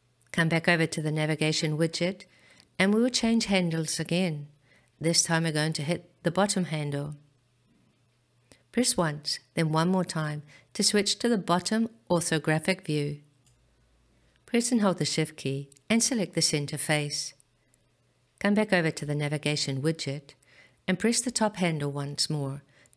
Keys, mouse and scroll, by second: 7.1 click, 9.8 click, 15.1 shift+click, 22.0 click.